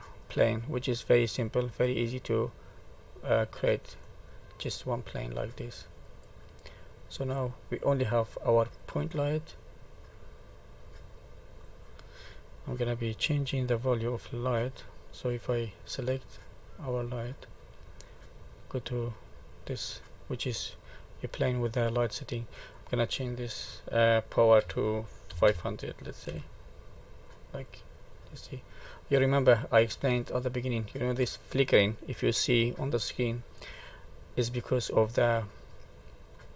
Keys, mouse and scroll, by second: 3.0 click, 4.0 middle click, 4.9-5.7 scroll down 4, 6.0 click, 6.6 middle click, 7.4-8.1 scroll up 3, 8.3 middle click, 10.1 middle click, 15.8 click, 16.4 click, 18.6 click, 22.4 click, 25.4 0, 27.6 middle click, 36.0 click.